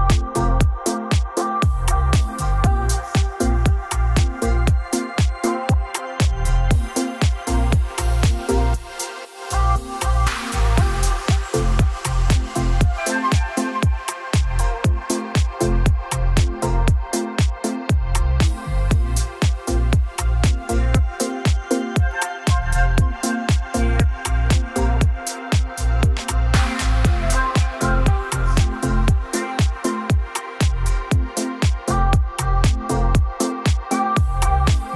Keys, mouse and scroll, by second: 0.0-0.4 typing, 4.5 click, 5.0 click, 5.6 click, 6.3 d, 9.4 m, 10.9-12.0 drag, 12.0-13.8 typing, 12.3 Return, 15.4 Escape, 16.8 click, 17.5 click, 18.1 click, 18.3 click, 20.0 click, 21.9 click, 23.3 ctrl+click, 24.6 ctrl+click, 25.5 ctrl+click, 27.5 ctrl+click, 28.3 ctrl+click, 29.7 click, 31.3 o, 32.2 click, 34.8 click.